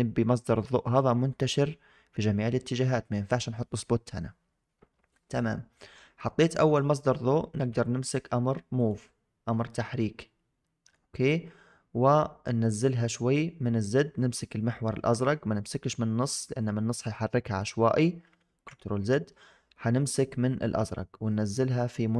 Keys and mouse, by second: 0.0-0.6 middle drag, 8.6 click, 9.5-10.9 middle drag, 16.6-17.5 drag, 18.3 ctrl+z, 20.7 click, 21.0-22.1 drag.